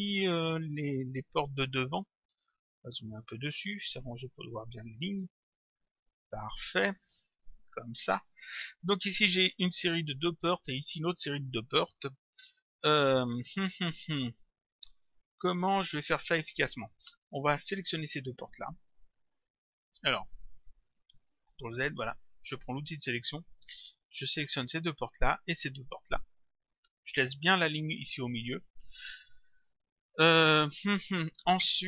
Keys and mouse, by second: 3.6 click, 5.6 click, 7.4 click, 19.4 click, 21.2 ctrl+z, 22.9 click, 24.4 click, 25.8 shift+click.